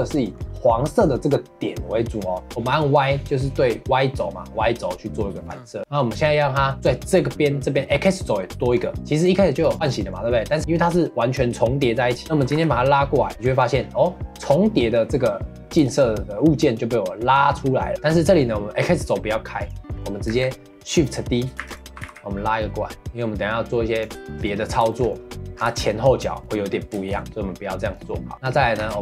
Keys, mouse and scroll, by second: 0.1 middle click, 0.3-2.5 scroll up 1, 2.5 g, 3.2-8.3 middle drag, 8.6 shift+middle click, 9.0 g, 9.6 click, 9.8-12.1 middle drag, 17.9-19.6 middle drag, 19.6 click, 19.9 middle click, 20.3 a, 21.6 shift+d, 21.9 g, 24.2-25.6 shift+middle drag, 25.6-26.4 scroll down 1, 26.4-28.3 middle drag, 28.3-28.8 scroll up 1, 28.8 3.